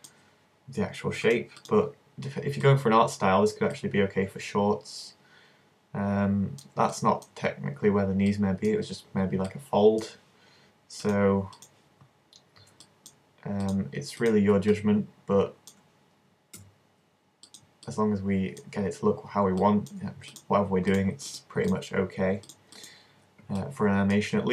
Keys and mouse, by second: 1.7-2.7 drag, 2.7-5.3 middle drag, 5.9 middle click, 11.8-12.9 drag, 12.9 middle click, 14.7-16.6 middle drag, 16.6 s, 17.7 click, 18.0-19.7 middle drag, 20.3-24.5 middle drag.